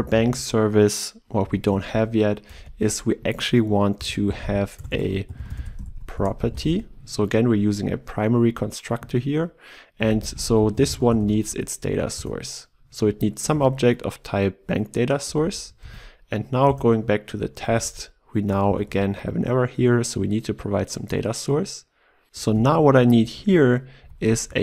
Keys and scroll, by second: 1.4 ctrl+b, 5.8 ctrl+BackSpace, 12.3 Return, 13.7 ctrl+w, 15.8 ctrl+w, 15.9 ctrl+e, 18.6 ctrl+e, 18.8 ctrl+p, 22.5 ctrl+/.